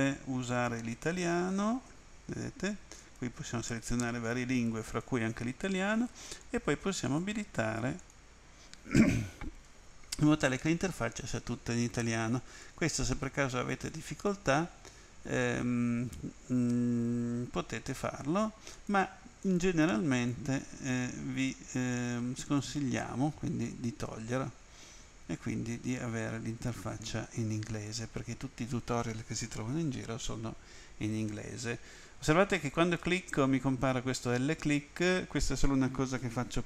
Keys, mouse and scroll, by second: 0.5 click, 3.0 click, 4.9 click, 6.5 click, 7.0 click, 8.0 click, 12.6 click, 18.8 click, 19.4 click, 20.2 click, 22.4 click, 27.9 click, 32.6 click.